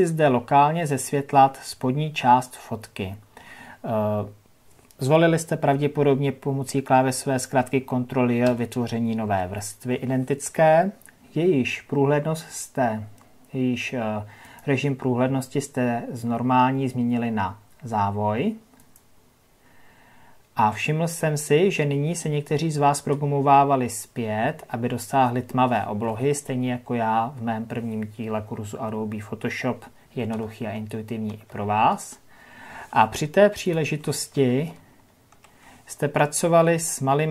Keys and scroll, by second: 8.4 ctrl+j, 34.3 ctrl+KP_Add.